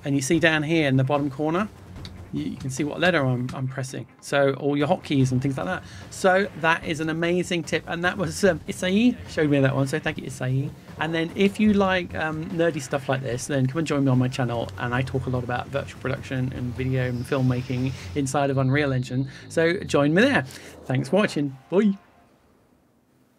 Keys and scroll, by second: 2.1 g, 2.6 g, 3.1 g, 3.6-5.4 g.